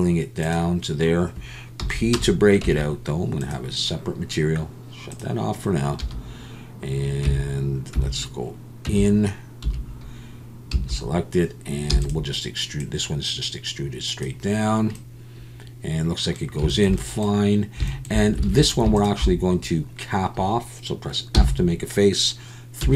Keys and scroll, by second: 1.8 p, 2.6 Tab, 7.2 Tab, 7.9 Tab, 8.9 Tab, 9.6 1, 10.7 a, 18.5 alt+a, 21.3 f, 22.8 3.